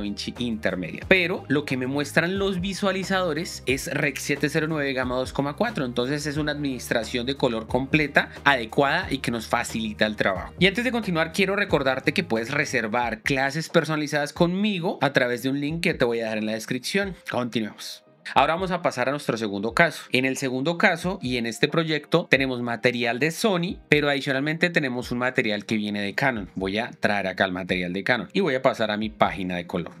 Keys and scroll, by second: 21.9 shift+4, 29.2 shift+6.